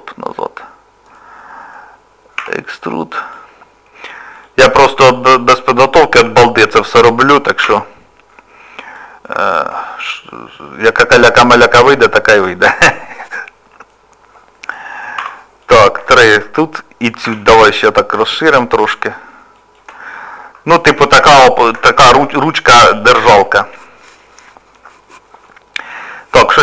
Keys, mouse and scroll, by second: 0.3 middle click, 2.4 e, 3.6 scroll up 2, 3.9 scroll down 1, 4.0 scroll up 1, 4.4 click, 4.8 middle click, 5.7 scroll down 1, 6.5-6.9 scroll down 1, 7.6 e, 9.4 shift+middle click, 9.9 middle click, 12.7 shift+middle click, 13.1 middle click, 15.2 3, 15.6 click, 16.1 shift+click, 17.2 s, 20.1 middle click, 21.1 scroll down 1, 21.2 scroll up 1, 21.2 scroll down 1, 21.7-22.4 scroll down 3, 22.4 shift+middle click, 22.8-23.3 scroll down 1, 23.3 Tab, 25.6 middle click.